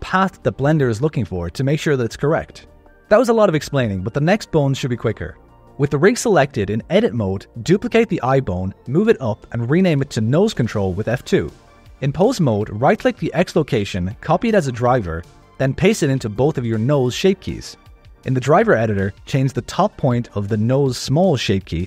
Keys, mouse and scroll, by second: 2.5 click, 3.7 ctrl+s, 5.6 click, 6.0 Tab, 6.3 scroll down 3, 6.6 shift+middle click, 7.4 shift+d, 8.7 F2, 11.2 click, 12.6 right click, 13.8 click, 14.6 click, 15.2 click, 16.2 right click, 17.0 right click, 18.3 click, 18.5 click, 19.5 click, 20.8 click, 21.2 click.